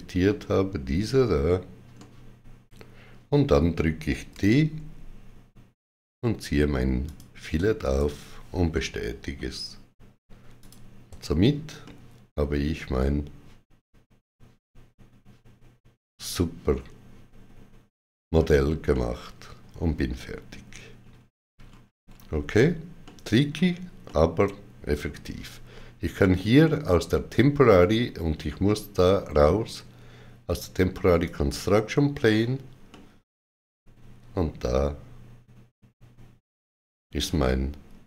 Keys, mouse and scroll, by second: 1.8 middle click, 4.2 d, 6.9 shift+click, 7.7 right click, 8.6 middle click, 10.5 click, 11.0 shift+w, 11.7 middle click, 18.8 middle click, 20.9-21.5 scroll down 3, 22.9 middle click, 23.9 middle click, 31.1 click, 31.1 middle click.